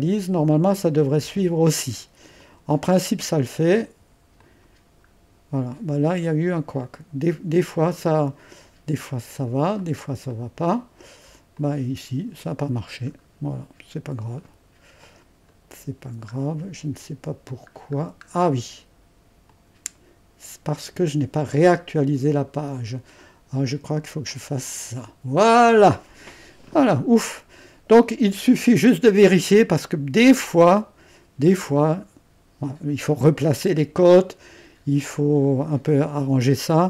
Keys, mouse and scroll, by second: 5.1-6.6 scroll up 1, 6.6 scroll up 1, 6.8-13.1 drag, 13.1-13.9 scroll up 1, 13.9-14.4 scroll down 1, 14.4 click, 15.1 click, 15.6-16.7 middle drag, 17.7-18.3 scroll down 1, 18.3-19.0 scroll up 1, 19.5-22.7 drag, 24.3-26.7 drag, 26.7-27.5 scroll down 1, 27.5 scroll down 1, 28.2-31.3 scroll up 2, 33.8-34.8 scroll down 2.